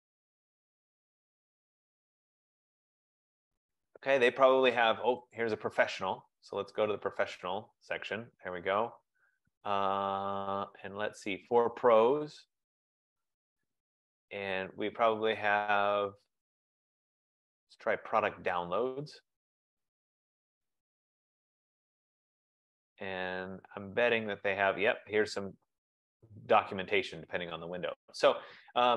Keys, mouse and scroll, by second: 1.3 click, 12.7 click, 14.3-17.3 drag, 19.0-23.9 drag.